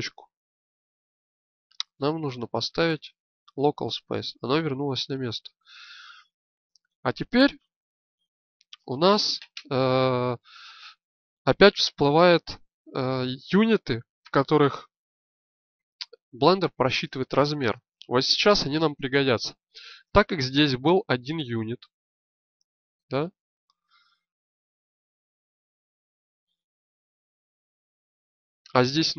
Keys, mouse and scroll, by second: 7.3 KP_1, 8.3 z.